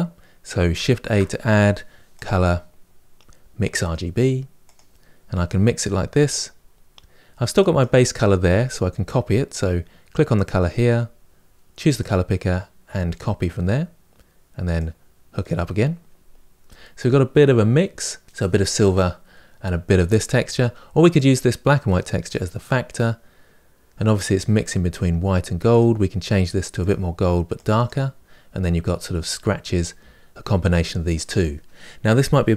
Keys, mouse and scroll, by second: 7.6 click, 15.3 click, 16.5 middle click, 17.0-17.5 scroll up 4, 20.9-22.1 drag, 26.6 click, 27.6-32.5 drag.